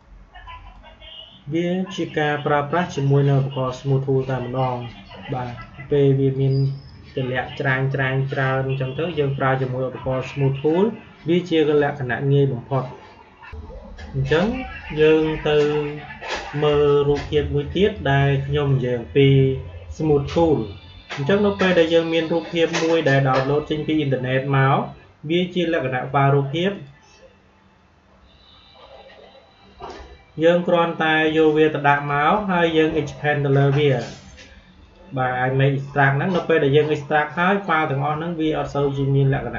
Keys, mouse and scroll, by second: 5.4-8.8 drag, 8.8 Delete, 13.4 click, 17.7 click, 26.6 click, 27.7 click, 31.2 click, 34.7 click.